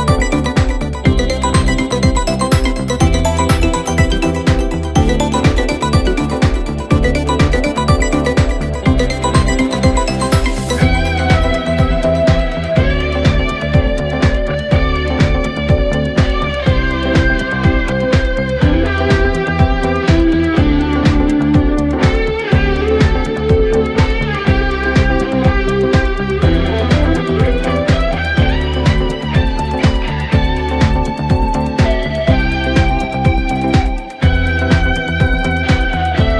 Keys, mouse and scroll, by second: 0.4 g, 4.6 KP_7, 5.5-6.2 scroll up 3, 6.2 s, 7.4-8.0 scroll down 3, 8.0 KP_1, 9.5-10.6 middle drag, 10.6-11.7 scroll up 1, 11.7 Tab, 12.4 click, 13.1 shift+click, 14.7 shift+s, 16.8 Tab, 17.4 scroll down 1, 17.7 middle click, 18.3-18.9 scroll up 1, 18.9-20.7 right drag, 20.7-21.3 middle drag, 21.3 click, 21.7-22.0 scroll up 1, 22.0 Tab, 22.9 KP_Divide, 23.2 KP_7, 24.0-24.6 scroll up 1, 24.6 click, 25.2 middle click, 25.9 scroll down 2, 26.7 shift+s, 28.7 Tab, 28.9-29.5 scroll down 1, 29.5 KP_Divide, 29.9 KP_1, 31.1 click, 31.9 shift+s, 34.4-36.3 middle drag.